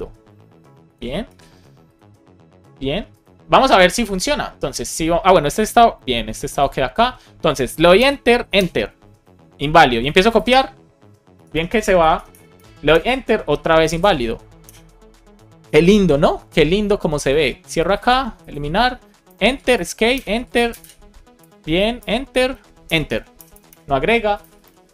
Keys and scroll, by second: 0.7 alt+shift+f, 1.2 super+s, 7.9 Return, 11.2 BackSpace, 11.8 BackSpace, 12.9 Return, 14.5 Return, 19.2 Return, 19.6 Escape, 20.0 Return, 21.2 Escape, 21.8 Return, 23.2 Return, 24.8 BackSpace.